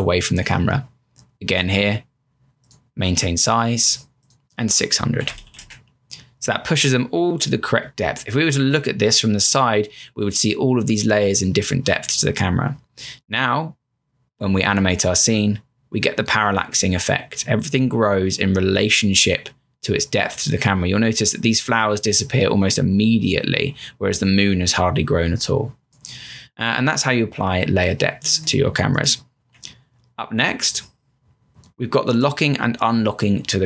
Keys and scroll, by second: 4.9-5.9 typing, 31.5 m.